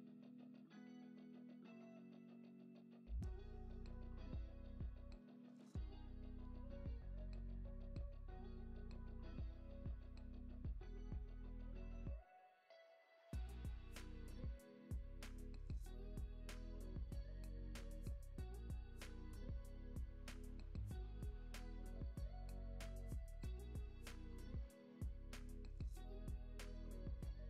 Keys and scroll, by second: 5.1 x, 13.1 alt+q, 21.3 super+s, 21.8 space, 23.2 space.